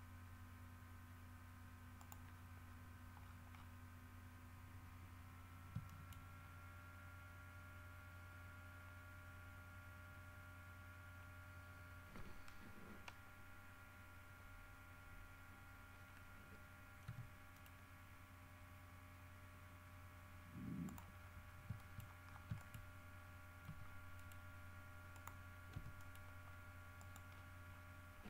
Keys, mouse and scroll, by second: 2.1 middle click, 2.7-3.1 scroll up 4, 3.4-4.0 scroll down 2, 4.5 scroll up 2, 6.0 shift+middle click, 6.6 shift+scroll down 2, 8.5-8.8 scroll up 2, 17.2 g, 17.7 middle click, 21.0 middle click, 21.3-23.6 scroll up 7, 21.9 shift+middle click, 22.7 shift+middle click, 23.8 g, 24.3 middle click, 25.4 click, 25.9 e, 26.1 middle click, 26.2-26.5 scroll up 2, 27.2 middle click, 27.5-28.1 scroll down 2.